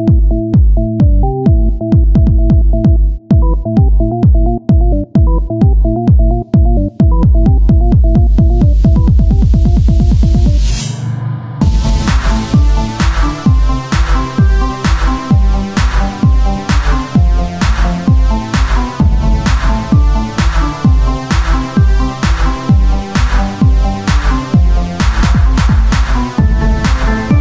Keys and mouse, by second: 0.6 s, 2.0-3.2 drag, 3.2-13.2 right drag, 13.2-15.0 drag, 15.0 Tab, 15.9 KP_1, 17.7-18.9 drag, 18.9 r, 20.5 middle click, 22.1 KP_1, 22.5 Tab, 25.2 e.